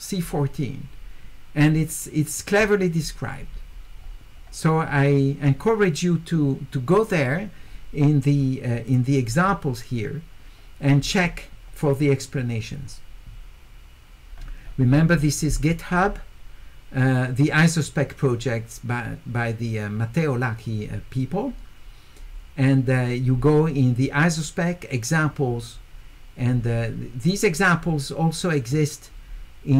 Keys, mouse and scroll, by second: 4.0-7.8 middle drag, 4.0-7.6 scroll up 2, 7.6 scroll up 1, 8.9 click, 10.7 middle click, 10.7 scroll down 2, 14.6 middle click, 14.9 middle click, 15.2 middle click, 27.2 click.